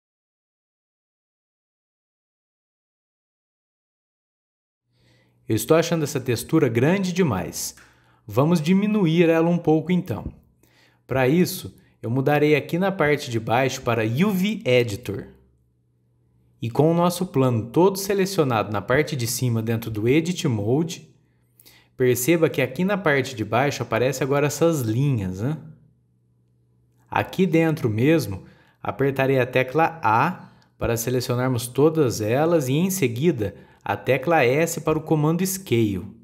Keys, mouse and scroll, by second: 0.2 click, 0.9 click, 2.3 click, 3.5 click, 3.9-4.4 scroll down 5, 13.9-16.9 drag, 18.2 scroll down 4, 21.4-22.6 scroll down 8, 26.6 scroll down 2, 27.3-28.3 shift+middle drag, 28.3 scroll down 1, 29.1 click, 29.9 a, 33.8-34.1 scroll down 2, 35.2 s.